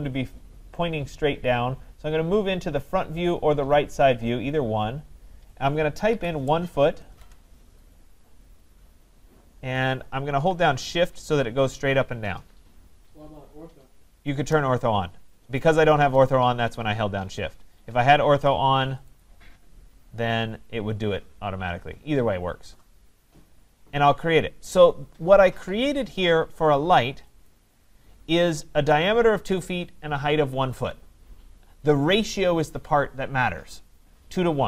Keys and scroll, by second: 7.1 Return.